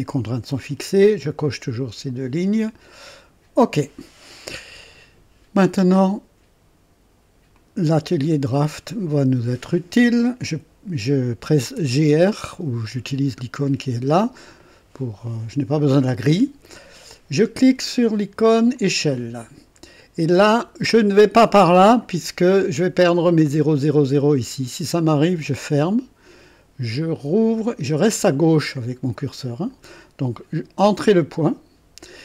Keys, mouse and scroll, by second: 3.2 click, 8.7 click, 11.5-12.5 typing, 18.7 click, 25.2 click, 27.3 click, 31.1 click.